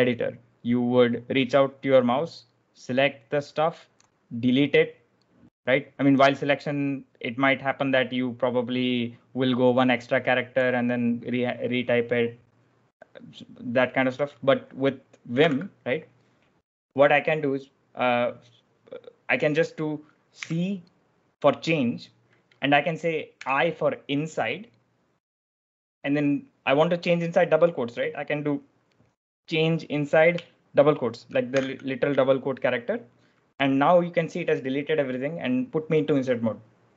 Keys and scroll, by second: 15.2 typing, 20.3 c, 23.2 i, 31.5 shift+'.